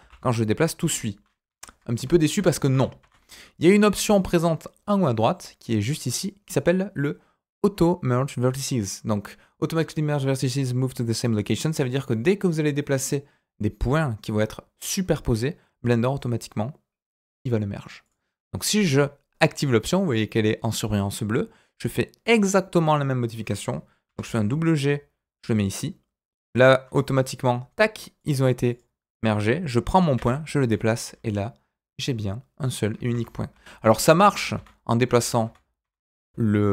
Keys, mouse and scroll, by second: 2.3 ctrl+z, 2.7 ctrl+z, 3.0 ctrl+z, 18.0 click, 24.0 g, 28.2 click, 28.7 click, 30.1 g.